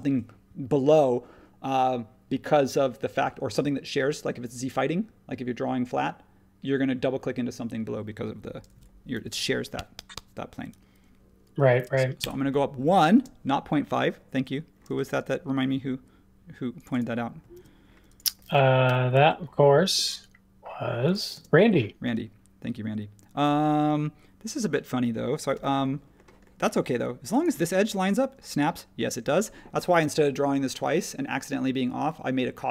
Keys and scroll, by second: 8.7 1, 12.2 Return, 13.1 space, 14.8 space, 17.5 super+1, 18.8 m, 21.3 space.